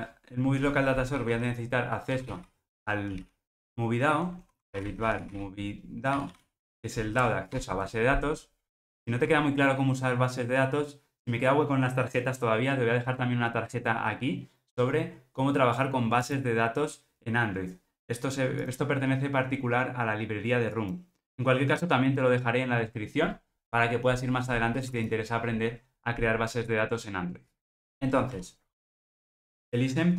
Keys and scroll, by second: 2.7 Return, 7.6 Return.